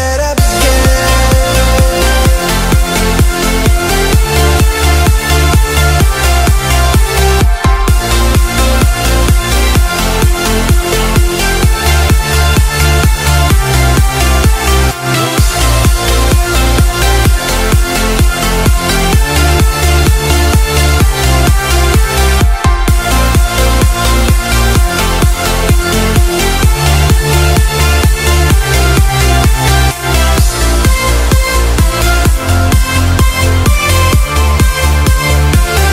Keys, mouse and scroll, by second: 0.2 scroll down 1, 0.5 right click, 1.5-1.8 scroll up 1, 1.8-2.9 right drag, 3.3 click, 5.8 ctrl+c, 6.2 right click, 7.6 scroll down 1, 7.9 right click, 8.7 scroll up 1, 8.9 click, 9.2 typing, 10.0 click, 12.5 KP_4, 12.8 KP_0, 13.3-19.4 drag, 19.4 F11, 19.5 F10, 20.1-24.7 drag, 24.8-25.4 scroll down 1, 28.5 click, 35.7 F10.